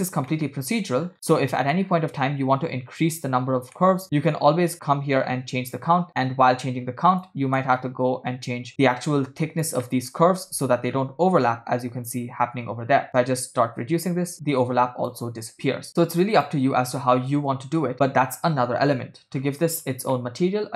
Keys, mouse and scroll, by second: 0.3 middle click, 1.0 scroll down 1, 1.2-1.5 scroll down 1, 1.6 middle click, 1.9 scroll up 3, 3.7 scroll up 1, 3.8 middle click, 5.2-7.4 drag, 7.8 middle click, 9.1 click, 9.9 middle click, 10.3 scroll up 3, 11.2-12.2 scroll up 4, 13.1-15.2 shift+drag, 16.4 click, 16.9-17.5 scroll down 4, 17.5 space, 18.7 space, 19.5-20.0 scroll down 3, 20.2-20.7 middle drag.